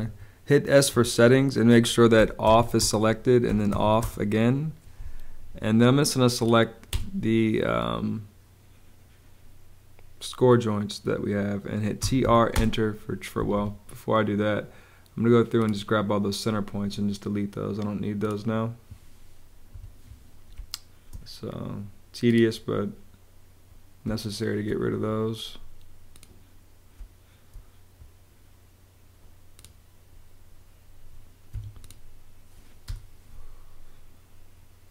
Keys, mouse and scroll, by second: 0.8 Return, 2.1 o, 2.3 f, 2.7 Return, 3.4 o, 3.9 Return, 6.8 space, 11.7-12.6 typing, 13.3 Escape, 14.4 Escape, 19.6 BackSpace, 20.4 space, 24.0 space, 26.9 space, 31.4 Escape, 32.8 BackSpace.